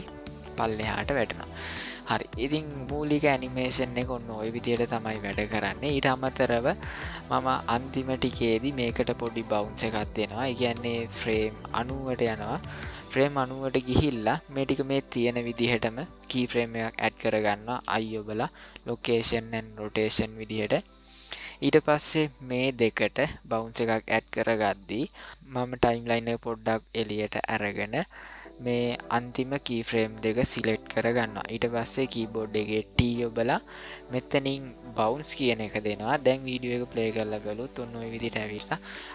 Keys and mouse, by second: 1.1 middle click, 1.7-2.1 shift+middle drag, 2.7-4.5 ctrl+middle drag, 5.2-5.9 shift+middle drag, 6.4 ctrl+middle click, 7.0 middle click, 11.4-12.8 drag, 17.8 i, 22.0-24.2 drag, 28.1-30.2 drag, 32.9 t, 36.2-39.1 drag.